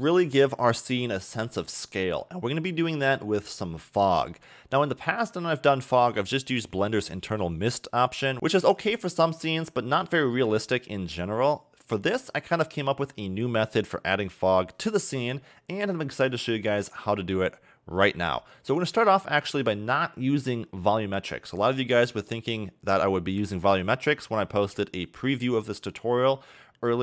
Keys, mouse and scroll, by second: 6.2-8.3 scroll down 1, 11.9-12.6 scroll down 1, 13.9-16.8 scroll down 1, 17.4-18.8 scroll down 2, 18.8 shift+middle click, 24.2-24.9 scroll up 2, 24.9-27.0 scroll up 2.